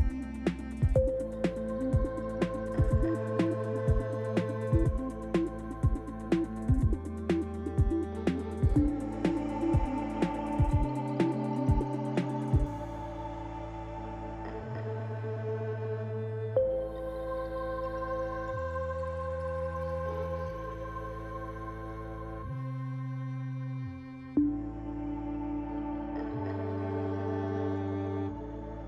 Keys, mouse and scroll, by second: 1.2 click, 2.2 click, 2.6 click, 3.8 click, 6.4 click, 9.4-10.5 shift+click, 10.4 click, 11.4 shift+click, 12.7 shift+click, 13.3 shift+middle click, 18.5 shift+click, 19.6 shift+click, 20.6 middle click, 23.4 shift+click, 24.4 middle click.